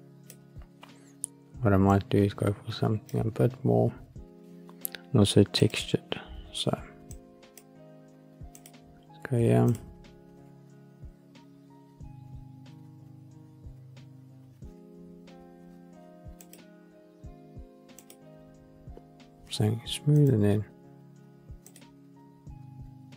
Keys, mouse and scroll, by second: 1.8-3.0 drag, 5.5 click, 7.0 click, 8.5-16.7 drag, 17.9 click, 20.0 click.